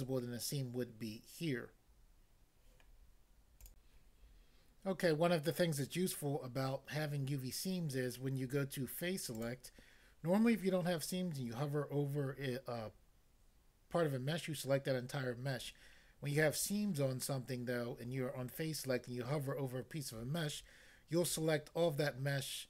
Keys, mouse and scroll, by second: 3.7 click, 9.3 click, 9.4 click.